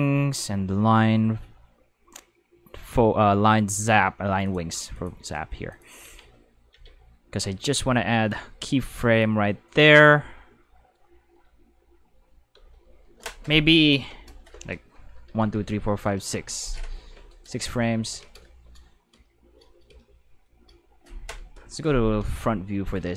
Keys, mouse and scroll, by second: 2.0 middle click, 3.2 middle click, 4.5 click, 4.9 click, 5.7 click, 6.0 Tab, 6.7 a, 9.2-9.9 drag, 12.1 space, 12.5 space, 18.0 alt+a, 21.5 End.